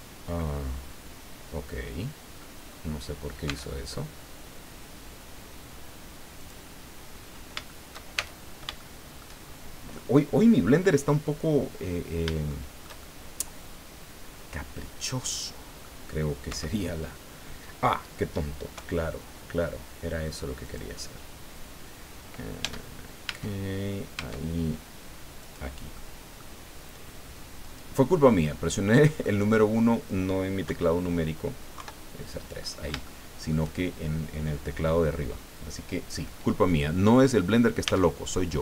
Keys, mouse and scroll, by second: 1.5-1.8 scroll down 2, 2.3-2.9 scroll up 4, 3.0-3.5 scroll down 2, 3.5 Tab, 6.4 click, 7.1-7.5 scroll up 1, 7.6 shift+click, 8.1 shift+Tab, 8.7 shift+click, 9.4 shift+scroll down 1, 11.8 scroll up 1, 12.5-16.0 shift+drag, 16.5 1, 18.7 KP_1, 20.6 click, 22.6 Tab, 23.3 Tab, 24.2 Tab, 25.4 click, 25.9 click, 27.6 click, 28.2 scroll down 1, 28.5 click, 29.5 scroll up 1, 30.6 KP_1, 31.8 KP_3, 32.6-32.9 scroll up 3, 33.0 shift+middle click, 36.8 scroll down 2, 37.8 Tab.